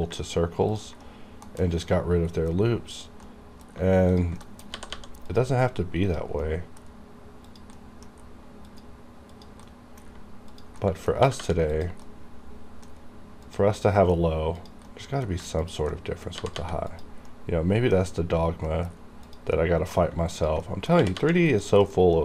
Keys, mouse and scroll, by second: 0.8 ctrl+click, 1.1 ctrl+middle click, 1.5 KP_1, 2.3 middle click, 2.9 click, 3.0 click, 3.3 middle click, 4.2 ctrl+click, 4.4 ctrl+middle click, 4.5 ctrl+KP_1, 4.8 g, 5.0 g, 5.3 click, 6.1 click, 6.4 middle click, 7.5 click, 7.5 click, 7.8 middle click, 8.6 click, 9.7 middle click, 10.5 ctrl+click, 10.6 ctrl+click, 10.9 ctrl+middle click, 11.3 g, 11.5 g, 11.8 click, 12.1-13.5 middle drag, 13.5 click, 13.8 middle click, 14.6 click, 14.9 middle click, 15.7 ctrl+click, 16.0 ctrl+middle click, 16.4 g, 16.6 g, 16.9 click, 17.3-18.7 middle drag, 19.3 click, 19.9 middle click, 20.3 ctrl+click, 21.0 g, 21.2 g, 21.5 click, 21.9 middle click.